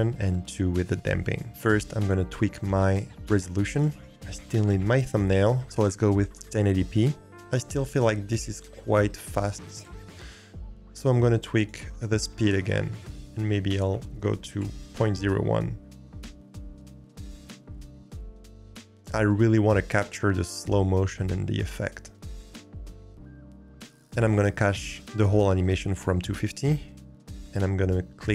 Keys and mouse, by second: 2.0 click, 3.8 click, 12.5-14.5 drag, 14.9-16.1 middle drag.